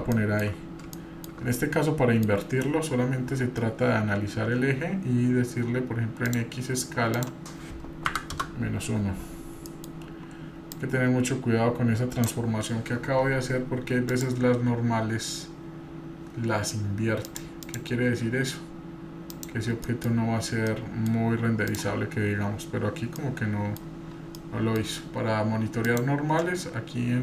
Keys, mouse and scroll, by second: 0.2 shift+middle click, 0.9 shift+scroll up 2, 0.9 shift+middle click, 1.5 middle click, 6.3-9.1 drag, 9.7 middle click, 10.7-12.3 drag, 14.1-17.3 drag, 17.6-19.7 drag, 19.8 middle drag, 20.7-21.1 middle drag, 20.7 scroll down 3, 21.7 click, 23.2-23.8 middle drag, 23.2 scroll up 4, 24.3-24.7 middle drag, 24.3 scroll down 3, 25.8-27.2 drag.